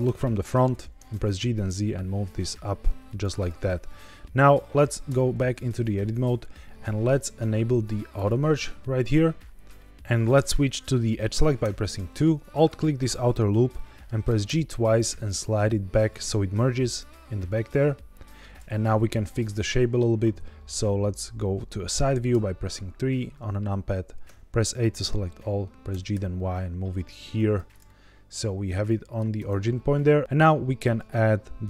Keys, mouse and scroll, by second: 0.0 KP_1, 0.7 shift+middle drag, 1.0 g, 1.1 z, 3.0 click, 3.8-4.5 middle drag, 5.0 Tab, 8.1 click, 9.0-9.7 shift+scroll up 3, 9.7 shift+middle click, 9.8 shift+click, 9.8 1, 11.5 2, 12.4 alt+click, 13.7 middle click, 14.2 g, 14.4 g, 16.0 click, 17.4 middle click, 22.2 KP_3, 24.2 a, 25.8 g, 26.0 y, 27.3 click, 27.8-29.1 middle drag, 29.3 Tab, 30.2 ctrl+2, 30.2 ctrl+z.